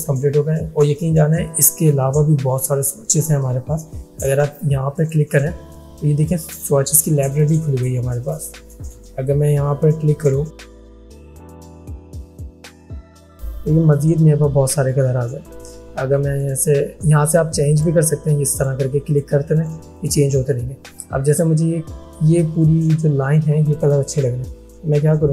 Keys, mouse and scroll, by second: 12.5-15.2 drag.